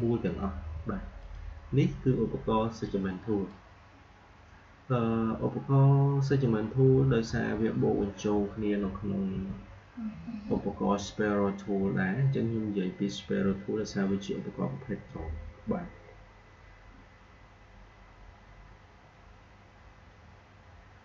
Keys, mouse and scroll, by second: 1.1-6.0 drag, 9.2 Delete, 20.9 click.